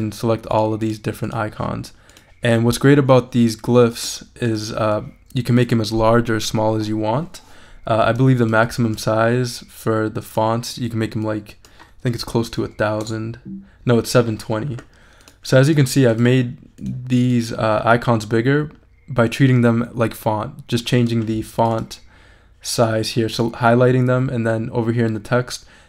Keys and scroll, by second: 11.9-12.8 typing, 13.0 Return.